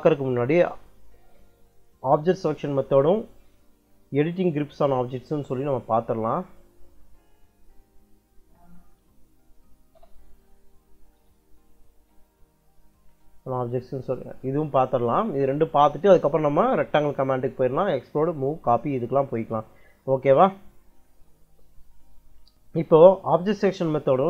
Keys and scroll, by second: 7.6 Right, 7.9 Left, 9.8 b, 11.0 BackSpace, 11.9 shift+b.